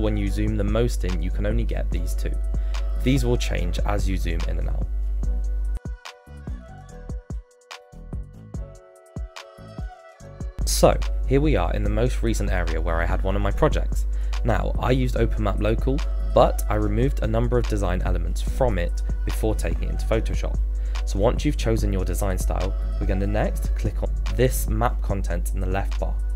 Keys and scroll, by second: 7.1 Return.